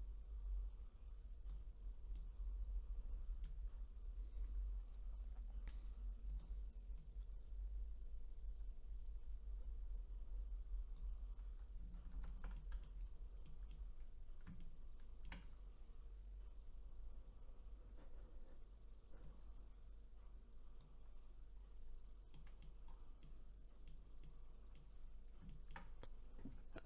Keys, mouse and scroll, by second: 2.1-5.3 middle drag, 6.3-10.0 drag, 12.1 ctrl+z, 12.5 middle click, 13.0-13.4 scroll up 3, 13.4 middle click, 14.1-14.6 scroll up 2, 14.6-17.6 shift+middle drag, 18.0-18.6 scroll up 1, 19.2-21.4 drag, 21.4-22.3 scroll down 6, 22.3 middle click, 22.9-23.2 scroll down 4, 23.2-25.0 middle drag, 25.0-25.5 scroll down 2, 25.5-26.8 shift+middle drag.